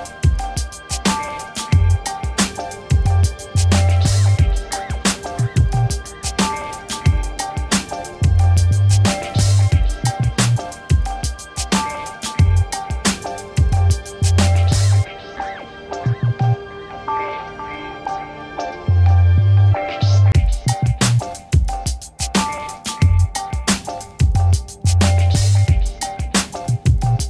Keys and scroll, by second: 0.7 ctrl+e, 5.6 ctrl++, 17.0 ctrl+1, 23.9-24.8 typing, 24.8 Return.